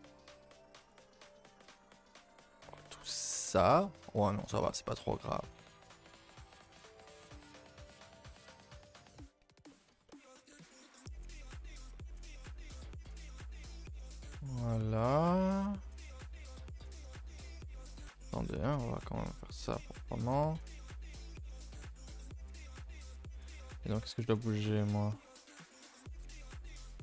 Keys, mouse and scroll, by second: 0.8 g, 2.8 middle click, 3.7 g, 4.2 r, 5.0 g, 7.2 g, 8.0-8.5 middle drag, 8.5 Tab, 8.7 shift+middle drag, 9.0 scroll up 2, 9.1 middle drag, 9.4 scroll down 2, 9.7-10.7 shift+middle drag, 10.7-11.0 scroll up 1, 11.0-12.7 middle drag, 12.7 a, 12.8 a, 13.0 KP_0, 13.8 scroll down 2, 14.1-16.0 shift+middle drag, 16.0 Tab, 16.3 KP_0, 17.5 click, 18.1 Tab, 18.4 click, 18.6 g, 19.7-22.1 typing, 22.7 middle click, 23.0-23.7 scroll up 6, 23.5 shift+middle click, 24.0 click, 24.2 Tab, 24.3-24.7 scroll up 5, 24.7-26.1 middle drag, 26.1 alt+click, 26.3-27.0 shift+middle drag.